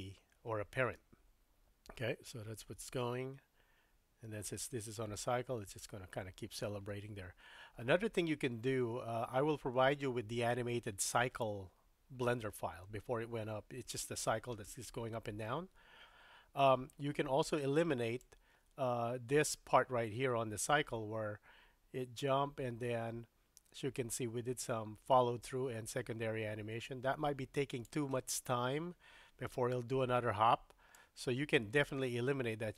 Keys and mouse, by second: 0.9 space, 10.5 space, 18.2-27.9 drag, 31.0-32.7 drag.